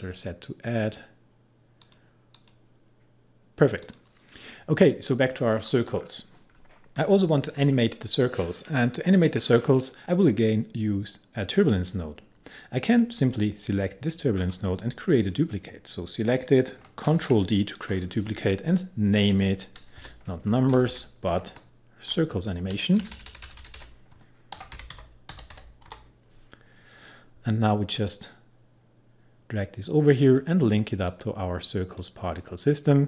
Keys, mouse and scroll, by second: 5.6 scroll down 1, 13.2 click, 14.3-15.2 scroll down 1, 15.2 click, 17.1 ctrl+d, 19.3 click, 20.0 Return, 20.5 Right, 20.8 BackSpace, 21.4 Left, 22.5 Right, 23.1 BackSpace, 24.4-26.4 typing, 28.0-33.0 drag.